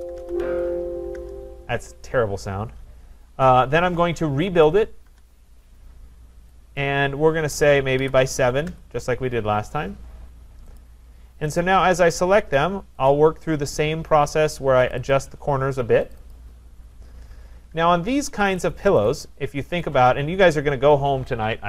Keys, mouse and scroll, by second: 0.0-1.0 typing, 1.2 Return, 4.2-5.1 typing, 5.1 Return, 6.8 click, 7.9 typing, 8.6 Return, 10.8 click, 11.6 click, 13.1 click, 14.9 click, 15.1 click, 16.2 click, 16.3 click, 16.9-17.5 scroll, 17.5-18.1 scroll, 18.6 click, 19.1 click, 20.2 click, 20.6 shift+click, 21.4 shift+click.